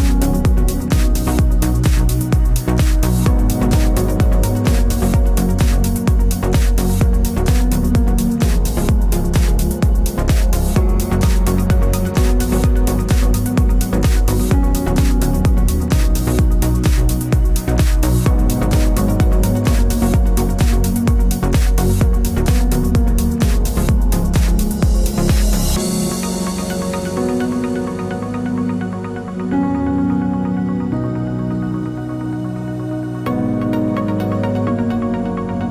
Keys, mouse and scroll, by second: 5.5 scroll up 1, 6.6 right click, 8.2 scroll up 1, 8.8 right click, 9.4 click, 20.7 alt+scroll down 2, 21.0-21.3 alt+scroll up 2, 21.5 alt+right click, 21.8 click, 22.4 alt+scroll down 1, 24.9 click, 27.3 ctrl+alt+shift+e, 29.1 click, 31.5 Up, 32.0 Down, 33.6 Up.